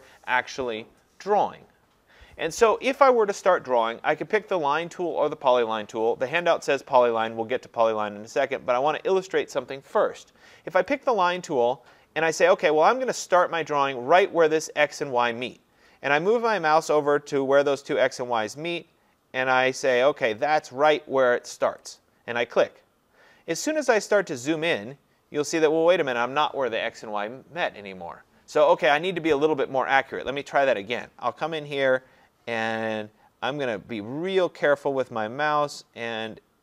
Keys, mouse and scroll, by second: 11.1 click, 22.0 click, 23.7-24.3 scroll, 24.9-25.4 scroll, 25.4-27.0 scroll, 29.3 Escape, 30.8 click.